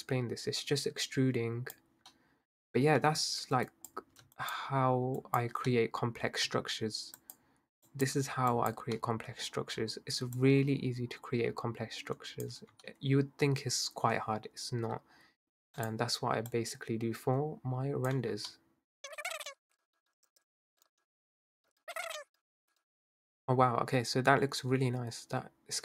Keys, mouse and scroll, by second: 1.8 Tab, 2.1-3.0 middle drag, 3.0 Tab, 3.7 click, 4.4 shift+click, 5.2 shift+click, 5.7-7.2 middle drag, 7.2 shift+click, 7.9 shift+click, 8.5 shift+click, 9.0-10.4 middle drag, 10.4 click, 12.5 Tab, 12.9-14.5 middle drag, 14.5-15.4 scroll down 1, 15.4 i, 16.5 click, 18.2 Tab, 18.5-19.1 middle drag, 19.1 Tab, 19.1 drag, 19.4 shift+click, 19.4 middle click, 19.5 scroll up 1, 20.0 shift+click, 20.8 middle click, 21.0 click, 21.7 Tab, 21.7 scroll down 1, 21.8 middle drag, 22.0 Tab, 22.3 middle drag, 22.5 scroll down 1, 22.8-25.3 middle drag.